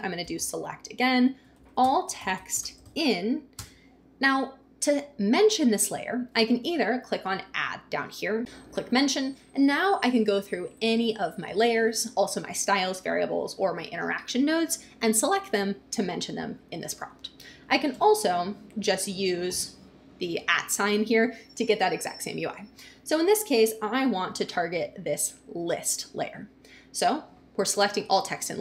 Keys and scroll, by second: 0.2 shift+s, 0.8 Return, 1.4-3.5 typing, 17.9 BackSpace, 19.4 shift+2, 28.5 Return.